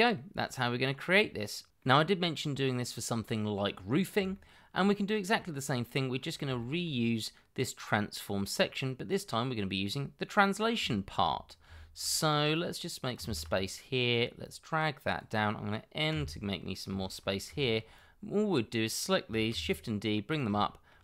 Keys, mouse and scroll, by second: 0.6 scroll down 1, 0.8 middle click, 2.0 shift+middle click, 2.5 middle click, 4.4 shift+middle click, 5.1-6.1 scroll down 1, 6.1 scroll up 1, 6.5 shift+middle click, 10.8 shift+middle click, 11.5-12.5 scroll down 2, 12.5 shift+middle click, 13.2 ctrl+z, 16.1 n, 16.9 shift+middle click, 19.5 shift+d, 20.6 shift+middle click.